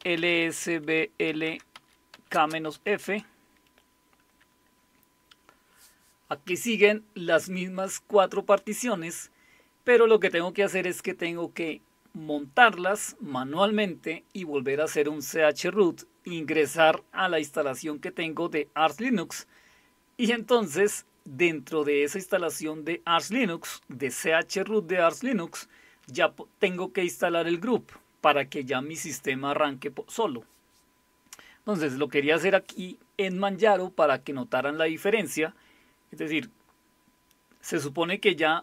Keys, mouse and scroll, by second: 0.0-3.2 typing.